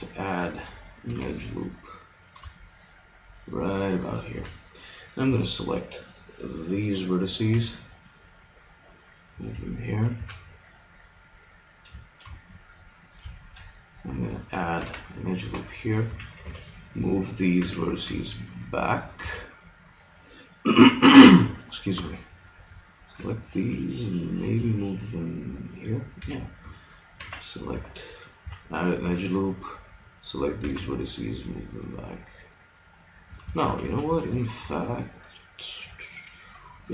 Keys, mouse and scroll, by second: 1.2 ctrl+r, 4.4 a, 5.4 b, 7.6 g, 9.8-11.0 drag, 10.2 a, 14.8 ctrl+r, 16.2 a, 16.4 b, 17.6 g, 19.2 a, 22.0 b, 23.2 g, 26.2 a, 27.2 ctrl+r, 28.4 a, 29.0 b, 30.6 g, 32.9 click, 33.4 ctrl+z, 33.6 ctrl+z, 33.9 ctrl+z, 34.0 ctrl+z, 34.4 ctrl+z, 34.6 ctrl+z.